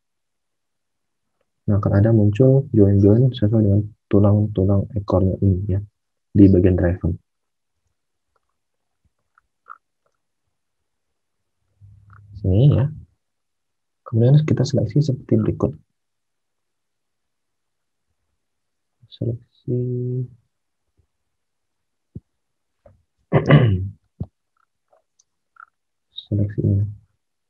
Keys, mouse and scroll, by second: 7.6 alt+Tab, 26.6 alt+Tab.